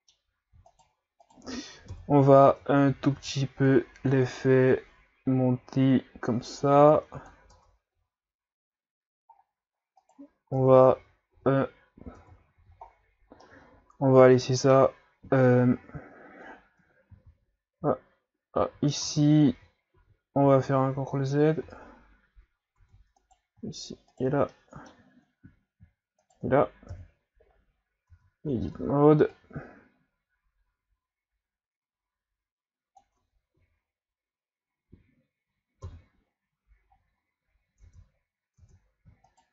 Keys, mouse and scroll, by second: 0.7 shift+right click, 1.2 shift+right click, 1.9 KP_1, 2.5 Tab, 2.9 a, 3.1 a, 3.7-7.5 drag, 7.6 Tab, 7.9 a, 8.3-8.8 scroll down 5, 9.4-10.0 scroll up 5, 10.0 right click, 10.6 Tab, 10.9 a, 11.3 a, 12.2 Tab, 12.6 a, 12.8-13.4 scroll down 5, 13.4-14.7 middle drag, 14.7-15.5 scroll up 1, 15.8 scroll up 2, 17.4 ctrl+z, 18.1 ctrl+z, 18.6 ctrl+z, 19.1 ctrl+z, 19.8 ctrl+z, 20.0 ctrl+z, 20.8 ctrl+z, 21.2 ctrl+z, 21.7 ctrl+z, 22.8 Tab, 23.2 right click, 24.1 shift+right click, 24.5-26.2 middle drag, 26.2 shift+right click, 26.9 KP_1, 28.1 Tab, 28.5 a, 28.7 a, 29.3-32.6 drag, 33.2 Tab, 33.5 a, 35.8 KP_3, 36.9-37.8 scroll up 4, 37.8 Tab, 38.6 Tab, 39.3 shift+right click.